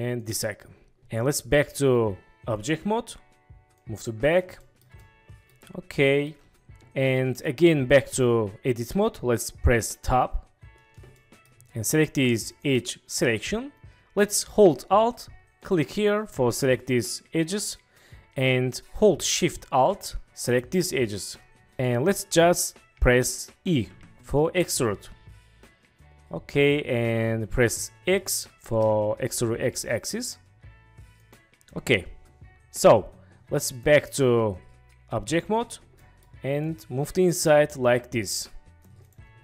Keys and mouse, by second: 1.7-2.6 drag, 3.7 click, 4.7 shift+click, 5.1-5.5 drag, 6.1 shift+click, 10.0 Tab, 11.2 click, 12.6 click, 15.6 alt+click, 20.4 alt+shift+click, 21.8 click, 23.9 e, 28.7 x, 31.2-31.9 drag, 33.7-35.4 drag, 36.0 click, 36.6-38.0 drag.